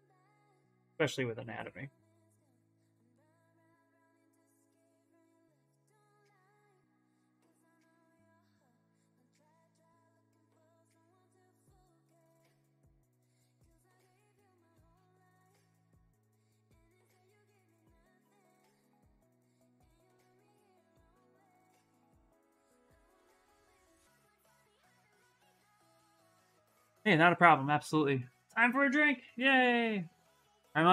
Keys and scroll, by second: 4.2 s, 6.0 s, 9.3 x, 13.6 s.